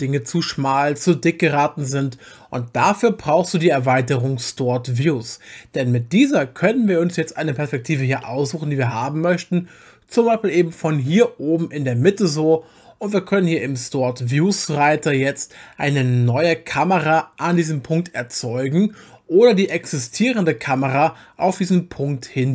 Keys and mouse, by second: 7.7 click, 8.2-10.8 middle drag, 14.3 click.